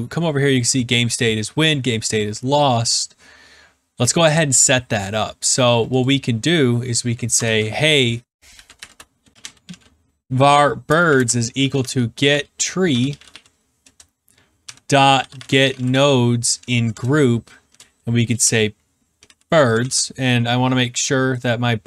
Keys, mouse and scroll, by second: 6.0 click, 7.3 Return, 8.2-10.1 typing, 11.3-13.5 typing, 13.8 Return, 14.9-16.9 typing, 16.9 Return, 18.6-20.2 typing, 21.4 click.